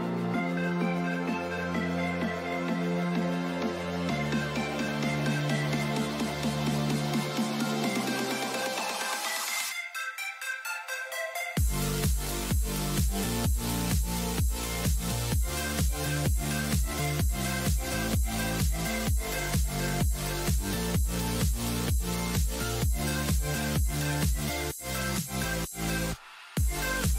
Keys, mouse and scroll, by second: 1.2-7.4 middle drag, 7.4 n, 10.8 KP_3, 13.1 KP_5, 16.0 n, 23.9-27.1 drag.